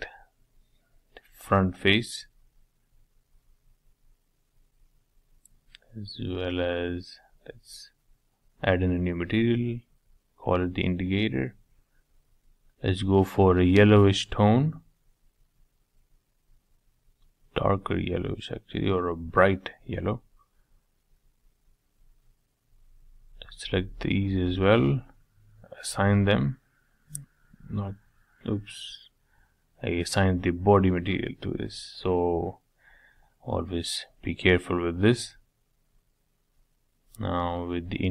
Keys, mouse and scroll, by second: 0.2-1.4 middle drag, 1.4 shift+click, 1.9-2.6 scroll up 3, 2.6 shift+middle click, 3.0-3.4 scroll down 2, 3.4-4.2 middle drag, 4.2 scroll down 1, 4.4-6.6 middle drag, 7.2-11.6 drag, 12.1 middle click, 12.9-14.1 scroll down 1, 14.1 shift+middle click, 14.8 click, 18.5 click, 18.9-20.8 middle drag, 21.6 click, 22.3 middle click, 23.0-23.8 scroll up 2, 23.8 shift+click, 24.2 scroll down 1, 24.4-25.8 middle drag, 25.8 click, 29.9-31.2 scroll down 4, 31.2-32.3 scroll down 1, 34.3-35.0 scroll up 3, 35.0-36.2 middle drag, 36.2 scroll down 2, 36.5 scroll up 1, 37.5-38.0 scroll down 2, 38.0 click.